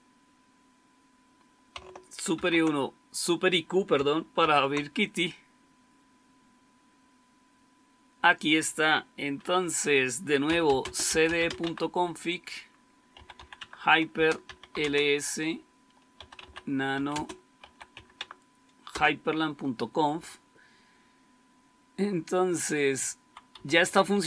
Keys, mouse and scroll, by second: 2.2 super+2, 4.3 super+q, 10.2-17.8 typing, 18.0 Tab, 18.9 Return, 20.1 Down, 20.6 Down, 23.1-24.2 typing.